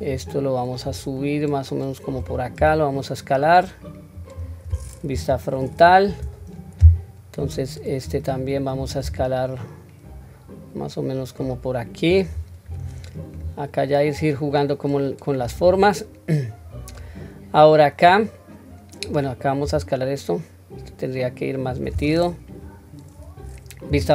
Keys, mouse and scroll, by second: 0.8-2.1 drag, 2.6 s, 5.1 KP_1, 5.8-6.6 scroll up 1, 7.4 click, 9.1 s, 12.8-13.3 drag, 14.1-15.6 drag, 16.6-17.1 scroll down 2, 16.9-19.1 middle drag, 19.6 s, 23.8 KP_1.